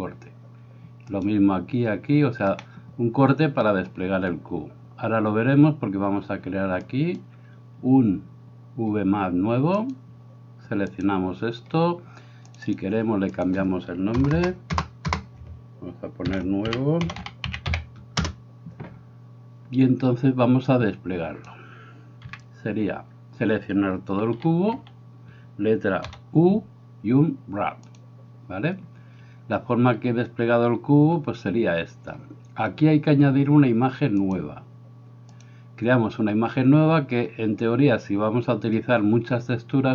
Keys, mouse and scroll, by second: 1.2-2.2 right drag, 2.6-3.7 middle drag, 6.9 click, 9.7 click, 10.9-18.7 drag, 14.3 BackSpace, 15.1 BackSpace, 20.9 click, 22.2 n, 24.4 a, 24.8 a, 26.1 u.